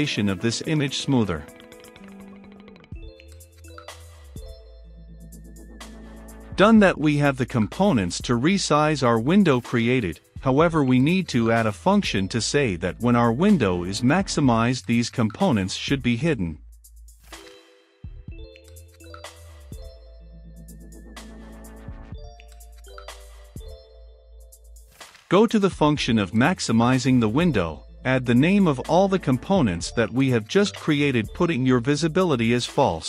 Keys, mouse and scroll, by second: 0.5 Left, 2.2-21.5 drag, 21.5-23.7 scroll down 2, 23.7-25.4 drag, 26.1-30.3 drag, 30.9 click, 31.2 Return, 31.5-33.0 typing.